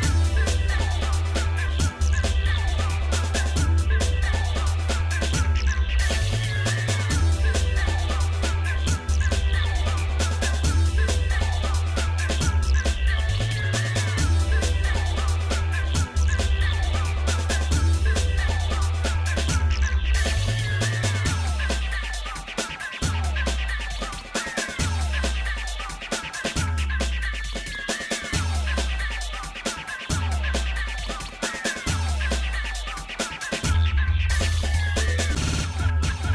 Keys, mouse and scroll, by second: 0.0 click, 2.4 click, 3.9 middle click, 4.8 click, 5.9-7.1 shift+middle drag, 7.4 ctrl+s, 9.2 click, 9.9 shift+middle click, 11.0 shift+d, 12.7 g, 20.2 middle click, 20.9 shift+middle click, 21.4 shift+click, 22.0 shift+click, 24.1 KP_Divide, 25.2-25.8 scroll up 2, 26.3 click, 27.4 click, 28.0 click, 28.6 click, 29.2 shift+middle click, 30.2 middle click, 31.4 g, 33.7 shift+middle click, 34.4 click, 35.1 Tab, 36.0 click.